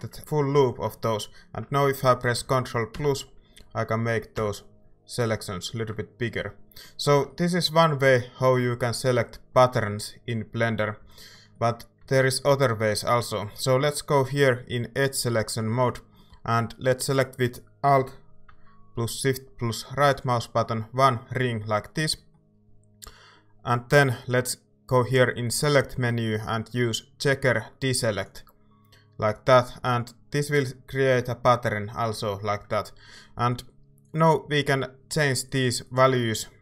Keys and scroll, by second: 2.9 ctrl+KP_Add, 4.4 ctrl+KP_Add, 11.0 a.